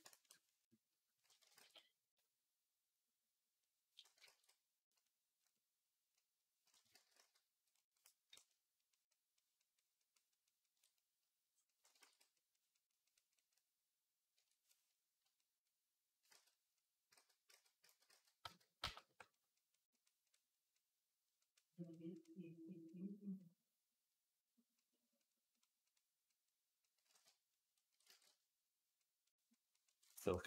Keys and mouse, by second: 0.0-6.8 ctrl+drag, 1.4 ctrl+z, 4.1 ctrl+z, 6.8 ctrl+z, 7.0 ctrl+z, 11.8 ctrl+z, 16.2 ctrl+z, 17.0 ctrl+z, 17.3 ctrl+z, 17.7 ctrl+z, 17.9 ctrl+z, 18.3 ctrl+z, 18.6 ctrl+z, 27.9 ctrl+z, 30.3 ctrl+z.